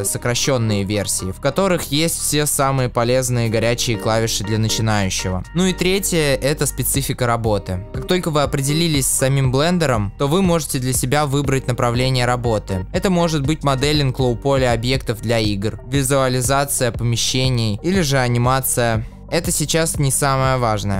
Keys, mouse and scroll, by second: 5.1 a.